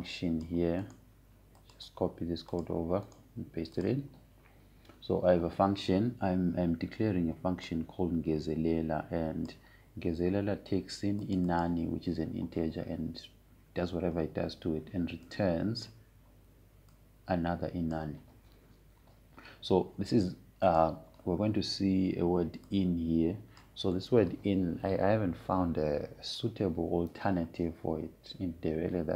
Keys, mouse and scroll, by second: 2.5 right click, 3.3 click, 4.8 right click, 5.5 click, 9.4-12.9 drag, 16.9-22.2 drag, 22.4-27.5 drag.